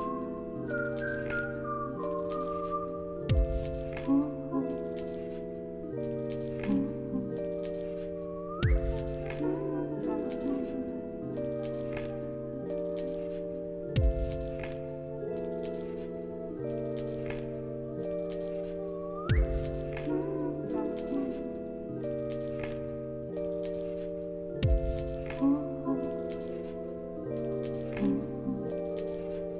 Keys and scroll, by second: 1.1 ctrl+c, 1.3 ctrl+v, 2.3 ctrl+c, 2.4 ctrl+v, 4.0 alt+x, 8.4 ctrl+c, 8.6 ctrl+v, 10.5 ctrl+c, 10.7 ctrl+v, 13.5 ctrl+s, 14.6 space, 22.2 space, 22.6 ctrl+s.